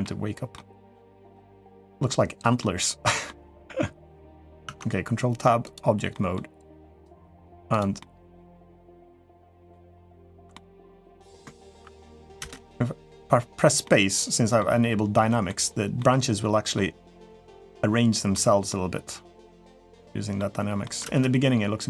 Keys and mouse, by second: 0.3 middle click, 1.1 middle click, 1.9 middle click, 2.8 middle click, 4.4 ctrl+Tab, 5.9 middle drag, 6.7 click, 7.0 middle drag, 7.5 click, 7.8-8.1 middle drag, 8.5-9.5 middle drag, 10.3 middle click, 11.5 ctrl+s, 12.2 space, 13.6-14.4 middle drag, 14.9-15.3 middle drag, 15.8-16.5 middle drag, 17.2-18.1 middle drag, 18.5-20.2 middle drag, 20.6 middle drag, 20.8 space.